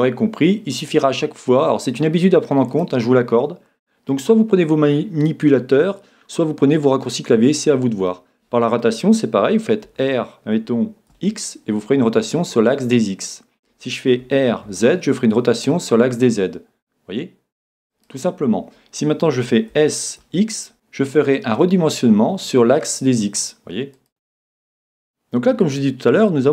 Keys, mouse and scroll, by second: 2.8 click, 7.0-9.9 middle drag, 9.8 r, 18.1 click, 19.7 s, 24.1 click.